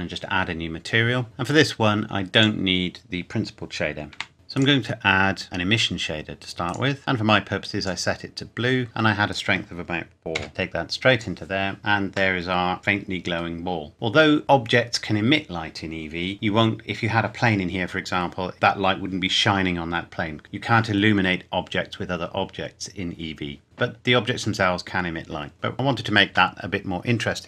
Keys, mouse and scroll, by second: 2.3 click, 4.2 Delete, 4.6 click, 6.7 click, 9.3 click, 10.4 4, 10.5 click, 11.8-12.4 scroll down 1, 12.4 middle click, 13.5 scroll down 1, 13.9-15.4 scroll up 1, 24.6-25.7 scroll up 1.